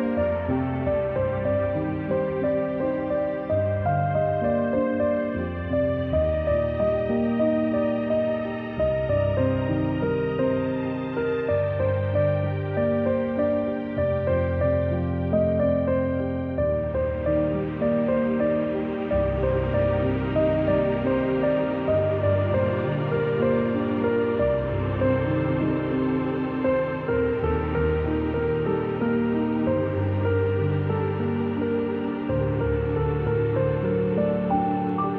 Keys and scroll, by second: 2.3 space, 6.8-8.8 typing, 12.9 shift+Left, 13.5 shift+Left, 14.3 shift+Down, 14.9 shift+Left, 17.9 shift+Left, 18.0 shift+Left, 18.9-20.3 typing, 26.8 z, 27.9 space, 29.2 typing, 33.4 z, 34.5-35.1 typing.